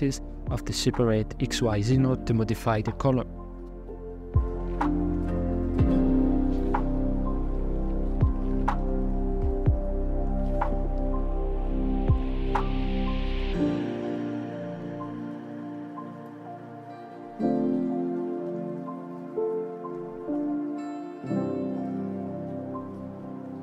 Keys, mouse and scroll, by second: 0.6-1.0 scroll up 2, 1.4-4.7 drag, 5.6 click, 10.8 scroll up 3, 11.0-14.2 shift+middle drag, 14.2 scroll up 1, 14.7 shift+middle drag, 14.8 right click, 15.5 click, 17.4-17.7 scroll down 3, 17.7 middle click, 18.1 scroll up 3, 19.2 click, 20.2 click, 21.9 click, 22.3-23.6 middle drag.